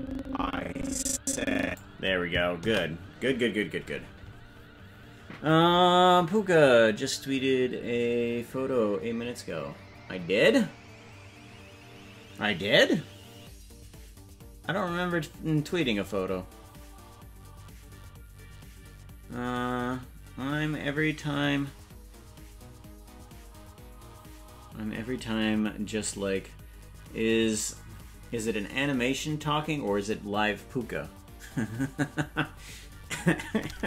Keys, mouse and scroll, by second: 5.2 ctrl+s.